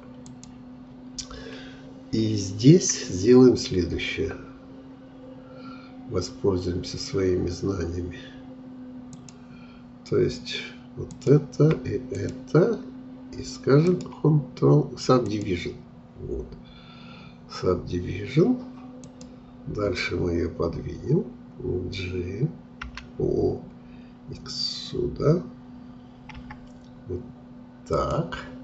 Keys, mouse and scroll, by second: 0.2-3.2 drag, 9.1-13.9 drag, 13.9-19.1 right drag, 19.1-22.0 drag, 22.8 g.